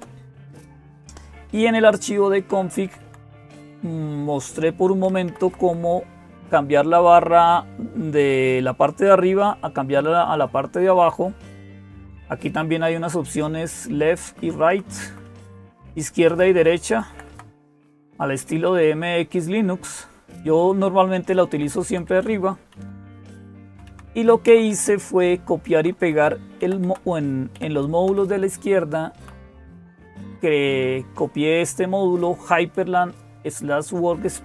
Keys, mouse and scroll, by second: 0.0-34.4 typing, 2.2 Down, 2.4 Down, 2.6 Down, 2.8 Down, 3.4 Up, 4.9 Right, 5.1 Right, 5.3 Right, 5.5 Right, 11.2-14.5 Right, 14.7 Right, 16.1 Right, 16.3 Right, 16.7 Left, 16.9 Left, 17.1 Left, 17.6 Right, 18.4 Left, 19.1-21.3 Left, 21.7 Left, 21.9 Left, 22.6 Down, 23.3 Down, 23.5 Down, 23.7 Down, 24.3 Right, 24.5 Right, 24.7-25.8 Right, 26.4 Left, 26.7 Left, 27.4 Left, 27.9 Right, 28.1-28.9 Right, 29.6 Left.